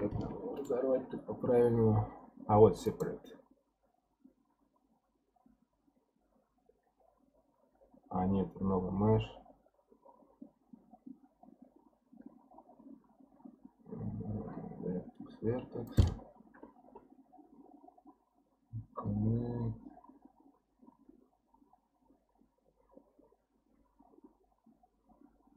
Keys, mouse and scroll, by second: 15.9-19.0 drag.